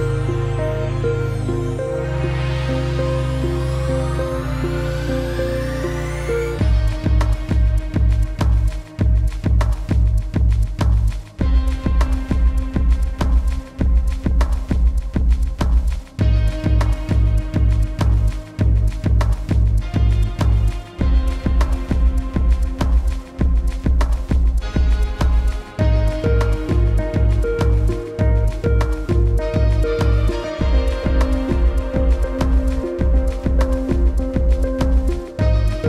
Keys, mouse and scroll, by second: 0.3-0.8 alt+scroll up 2, 0.8 click, 1.0 space, 2.3 click, 5.3 shift+m, 6.4 x, 7.0 click, 8.9 click, 10.7 v, 10.9 click, 12.1 z, 13.1 shift+click, 19.4 space, 19.5 click, 19.8 space, 20.0 click, 21.2 space, 21.3 click, 23.8 click, 24.8 click, 25.9 click, 29.7 click, 34.1 click.